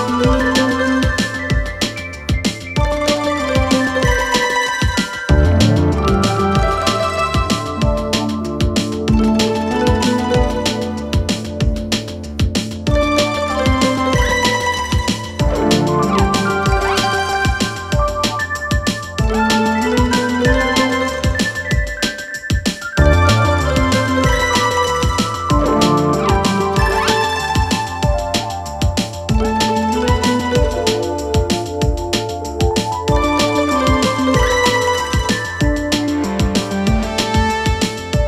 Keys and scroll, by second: 3.9 space, 34.7 /.